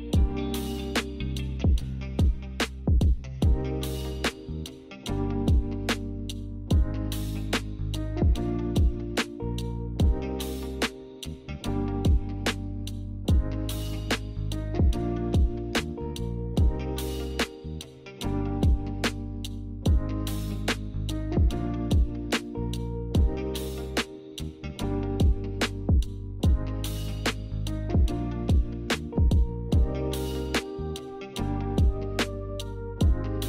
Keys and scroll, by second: 2.9 d, 7.2 Escape, 8.0 z.